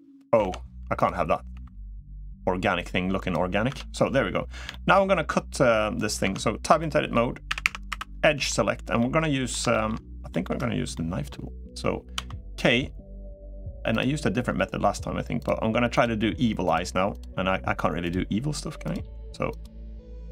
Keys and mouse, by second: 0.2 o, 1.2 g, 3.6 Tab, 4.4 shift+middle drag, 6.0 Tab, 6.5 middle click, 7.2 a, 7.4 a, 7.8 2, 8.0 middle click, 8.7 middle click, 9.5 shift+middle click, 10.1 middle click, 10.7 middle click.